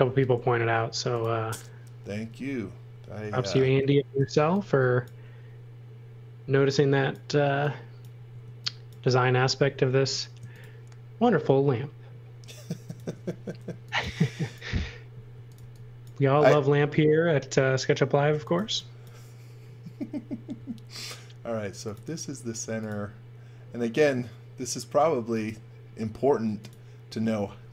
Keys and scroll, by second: 0.3 m, 2.1 space, 3.3 m, 4.1 e, 8.2 space, 9.5 m, 13.6 x, 13.9 v, 15.0-16.0 typing, 18.1-19.0 typing, 20.5 l, 27.4 e.